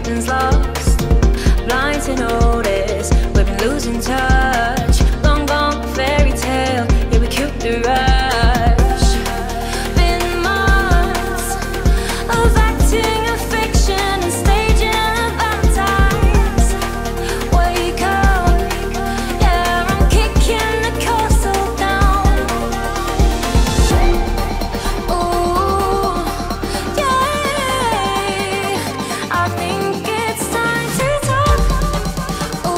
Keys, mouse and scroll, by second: 0.4 click, 1.6 v, 2.5 Down, 3.2 Right, 3.8 click, 5.5-8.9 alt+drag, 8.9 Right, 9.5 Up, 10.3 i, 12.2 right click, 13.0-15.5 drag, 15.5 ctrl+z, 16.2-20.9 drag, 20.9 v, 21.9-24.6 alt+drag, 24.6-28.9 drag, 28.9 Up, 30.0 click.